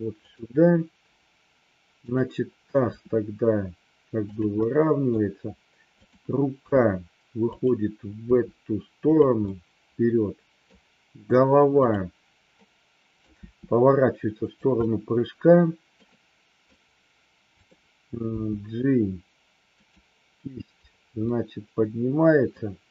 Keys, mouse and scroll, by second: 2.8 r, 4.5 middle click, 5.9 click, 6.5 g, 7.5 click, 8.2 r, 9.5-10.7 middle drag, 11.8-12.2 drag, 12.5 middle click, 13.3 r, 14.4 click, 14.8-15.9 middle drag, 16.0-16.7 middle drag, 18.3 g, 21.3 scroll up 1, 21.4-22.5 middle drag.